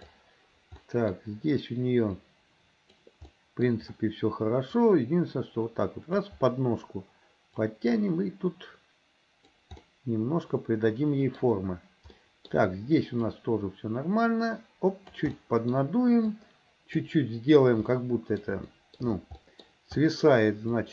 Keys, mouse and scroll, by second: 0.9 middle click, 2.2 click, 3.4 middle click, 4.9-6.3 drag, 7.7-9.6 drag, 9.9-11.5 middle drag, 12.2 middle click, 13.3-15.2 drag, 15.4 middle click, 16.4 click, 17.9 middle click, 18.7 shift+middle click, 19.4 middle click, 20.0 middle click, 20.8 click.